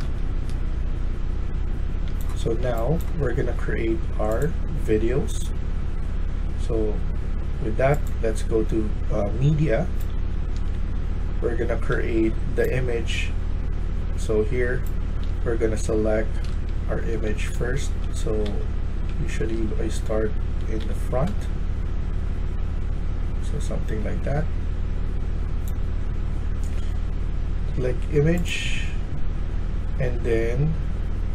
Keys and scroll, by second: 0.0-0.4 typing, 2.0 e, 9.2-12.1 typing, 15.1 d, 16.1-21.2 typing.